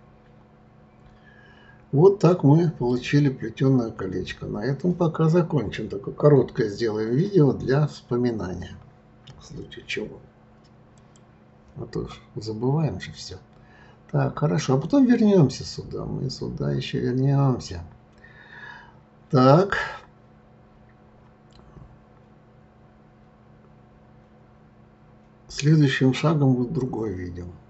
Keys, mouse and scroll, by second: 2.0-3.3 middle drag, 3.3-4.3 scroll down 2, 10.9 click.